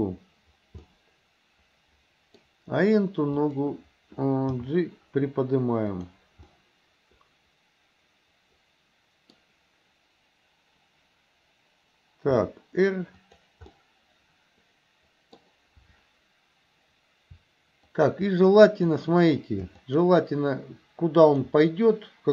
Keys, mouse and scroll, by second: 0.9-2.4 middle drag, 3.4 click, 4.6 g, 6.5-12.4 middle drag, 12.4 r, 13.8-15.4 middle drag, 17.9 shift+click, 18.8 click, 19.8 shift+click, 21.3 shift+click.